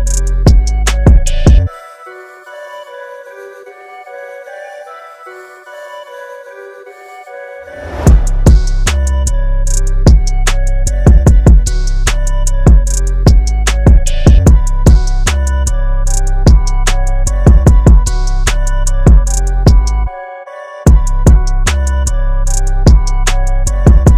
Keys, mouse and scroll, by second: 1.6 click, 2.7 scroll down 1, 7.6 click, 8.5-8.9 scroll up 1, 19.6-20.6 scroll up 1, 20.6-21.0 scroll down 1, 21.5 scroll up 1.